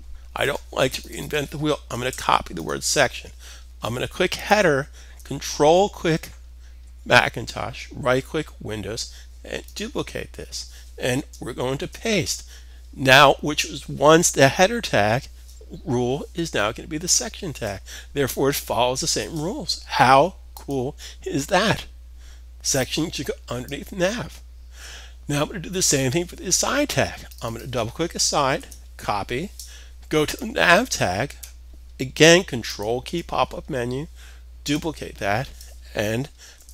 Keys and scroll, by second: 1.4 super+c, 1.6 super+c, 11.3 super+v, 28.1 super+c, 32.6 super+c, 35.5 super+c, 36.0 super+v.